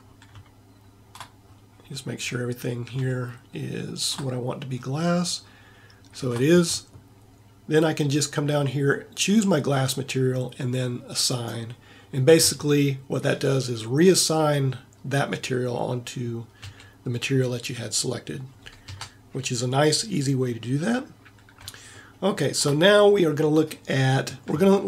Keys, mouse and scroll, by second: 3.8-5.4 middle drag, 5.5-7.7 middle drag, 9.5 middle click, 16.8 a, 19.0 Tab.